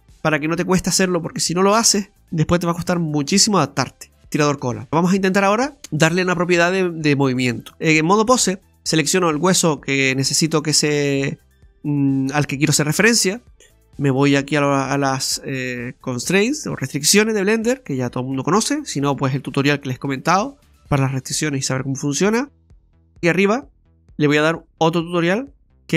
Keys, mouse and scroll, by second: 4.8 scroll down 1, 6.2 scroll up 1, 7.7 right click, 9.6 right click, 13.7 click, 16.7 click.